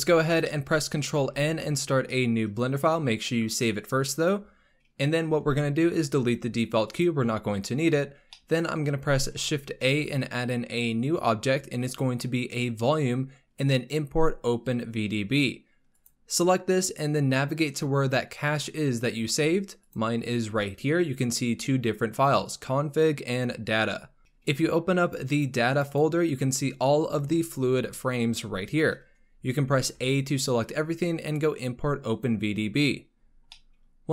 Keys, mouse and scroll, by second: 0.1-0.4 scroll down 2, 0.4-1.1 middle drag, 1.1 ctrl+n.